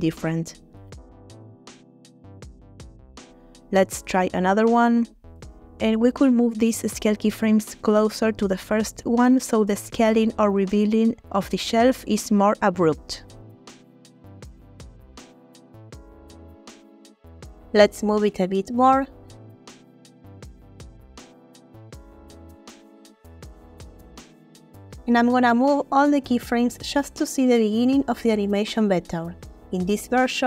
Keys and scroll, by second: 1.8 space, 2.8 space, 5.6 space, 8.0 space, 11.6 g, 13.8 space, 16.2 space, 17.6 g, 22.2 space, 23.9 a, 26.6 g, 29.3 space.